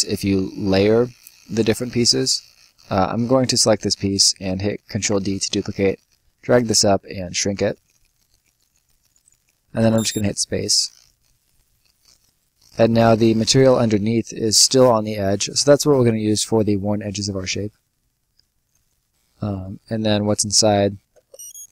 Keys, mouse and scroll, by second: 0.4 middle click, 0.6 scroll up 1, 0.9 right click, 1.1 scroll down 1, 1.5 right click, 1.9 middle click, 3.1 click, 4.8 ctrl+click, 4.9 ctrl+d, 5.4 click, 7.4 click, 9.7 space, 10.7 right click, 11.1-11.9 scroll up 1, 11.9 middle click, 12.0-12.5 scroll up 1, 12.5 middle click, 12.7-13.7 scroll down 1, 14.4 right click, 18.3 click, 21.1 space.